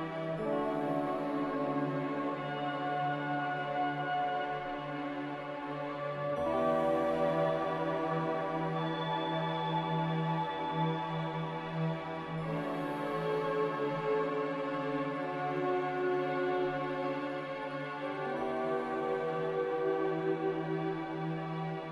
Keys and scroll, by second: 18.2 a, 21.7 ctrl+c.